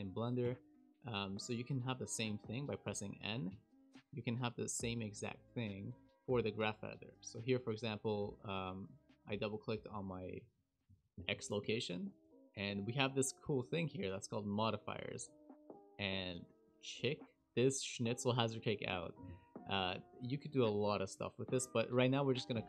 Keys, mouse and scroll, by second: 0.4 n, 7.6 click, 7.7 click, 9.3 click, 9.4 click, 11.5 KP_Decimal, 12.0 scroll down 3.